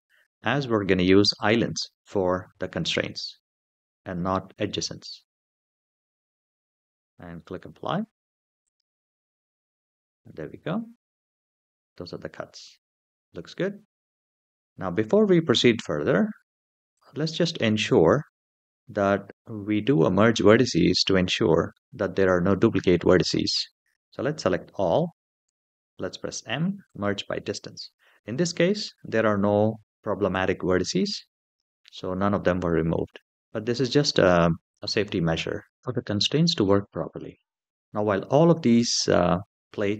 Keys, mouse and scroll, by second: 6.3-8.1 scroll down 3, 8.4 click, 10.3-12.6 middle drag, 16.7 click, 21.5-23.0 middle drag, 24.2 a, 25.2 m, 36.3 Tab, 36.9-37.7 middle drag.